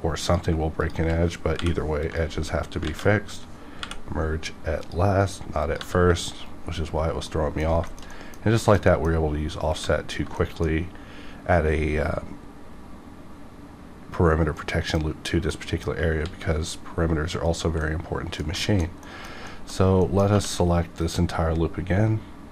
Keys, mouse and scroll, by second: 0.2 click, 0.4 click, 0.8 shift+click, 1.5 m, 1.9 click, 2.8 ctrl+z, 3.7 m, 4.8 click, 5.8 g, 6.2 right click, 6.6 scroll down 1, 7.5 scroll down 1, 7.9 shift+middle click, 8.6 shift+middle click, 8.7 shift+middle click, 10.4 middle click, 13.0 middle click, 15.5 middle click, 16.2 x, 17.8 middle click, 18.1 middle click, 19.0 shift+middle click, 19.7 shift+scroll up 2, 20.1 middle click, 20.4 2, 21.0 click, 21.5-21.9 scroll down 1.